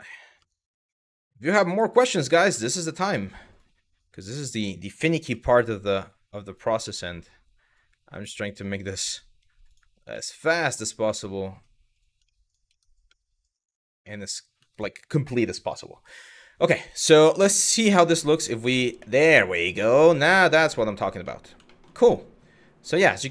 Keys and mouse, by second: 1.9 click, 2.3 middle click, 2.7 middle click, 3.3 click, 4.7 s, 5.0 y, 6.2 click, 8.1 click, 8.6 middle click, 9.8 middle click, 10.3 shift+middle click, 10.8 middle click, 11.9 shift+middle click, 12.3 Tab, 12.7-13.1 middle drag, 13.2 click, 13.7 middle drag, 16.6 shift+middle drag, 17.4 click, 17.8 middle drag, 18.6-19.4 middle drag, 20.1 middle click, 21.0 middle drag, 21.4 shift+middle click, 21.8-22.5 middle drag, 22.8 shift+middle click.